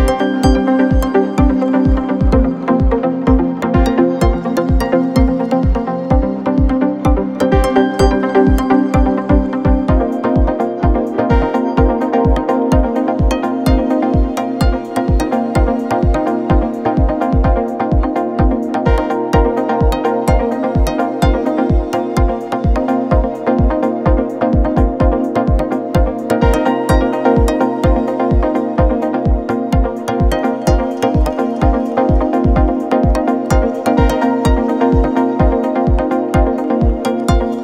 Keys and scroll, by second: 3.7 3, 9.3 F9, 10.6 4, 11.4 3, 11.8 ], 12.2 Escape, 13.2 0, 13.3 Return, 16.2 F1, 17.4 ctrl+d, 17.5 Escape, 20.8 4, 23.9 Delete, 25.1 2, 26.2 ..